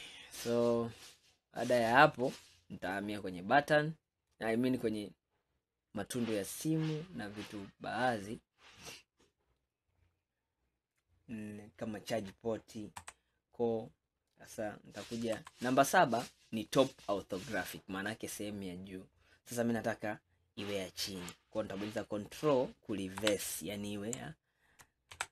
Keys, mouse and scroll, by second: 1.1-2.9 middle drag, 2.9-3.3 scroll up 1, 3.3-4.7 middle drag, 4.7 scroll down 2, 6.7-9.8 middle drag, 13.0 KP_1, 23.3 ctrl+KP_1.